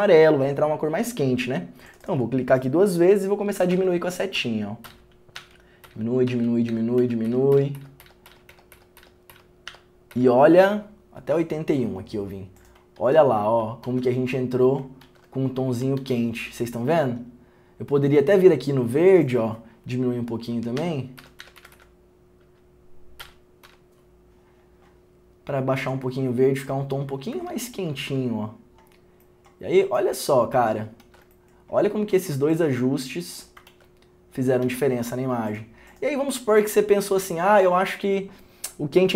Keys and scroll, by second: 3.9 Down, 12.9 Down, 14.0 ctrl+d, 15.2 ctrl+d, 31.2 ctrl+d, 33.8 ctrl+d, 34.8 ctrl+d.